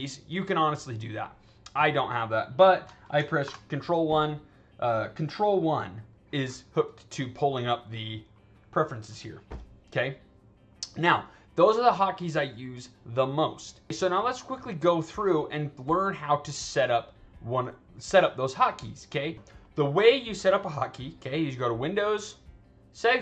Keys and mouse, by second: 1.8 click, 3.3 ctrl+1, 7.9 click, 8.9 click, 11.5 click, 15.4 click, 21.8 click, 23.0 click.